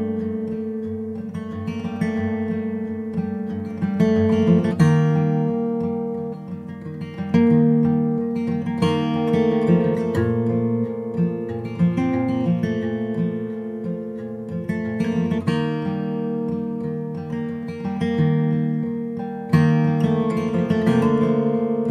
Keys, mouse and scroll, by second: 0.0-1.7 middle drag, 1.7-3.2 drag, 3.3 middle click, 4.8 click, 5.2 s, 6.3-7.3 drag, 6.8 s, 7.7 middle click, 8.5-9.8 middle drag, 8.6 Tab, 14.2 Tab, 14.2-15.3 middle drag, 15.3 right click, 15.4 click, 17.5 Tab, 17.7 middle click, 18.7 Tab, 18.9 middle click, 19.7-21.9 drag, 20.6 right click, 21.1 Tab.